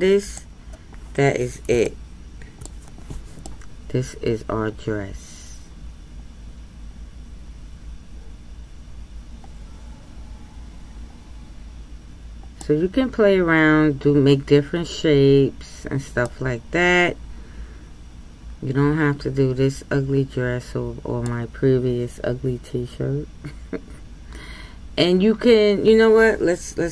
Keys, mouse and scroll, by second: 0.9-1.8 scroll up 2, 1.8-6.5 shift+middle drag, 16.3-19.2 middle drag.